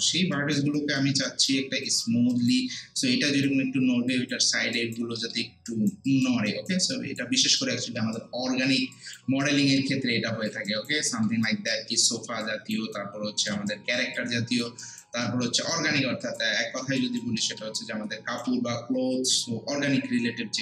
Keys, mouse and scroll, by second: 0.3 alt+right click, 0.8 alt+click, 1.3 alt+right click, 1.9 alt+click, 2.3 alt+right click, 4.1 alt+click, 4.8 alt+right click, 5.2 alt+middle click, 5.7 alt+right click, 6.1 alt+click, 6.5 alt+right click, 6.9 alt+click, 7.4 alt+right click, 7.8 alt+middle click, 8.2 alt+right click, 8.9 alt+click, 9.4 alt+right click, 9.8 alt+click, 10.7 alt+right click, 11.1 alt+middle click, 11.5 alt+right click, 11.9 alt+middle click, 12.4 alt+right click, 12.9 alt+click, 13.7 alt+right click, 14.2 alt+click, 15.3 alt+middle click, 15.7 alt+right click, 16.6 alt+middle click, 17.0 alt+right click, 17.4 alt+middle click, 17.8-20.6 alt+right drag.